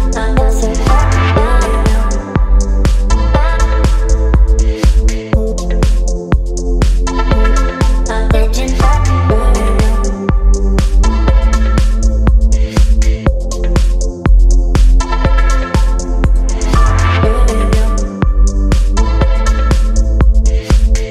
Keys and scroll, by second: 3.9 v.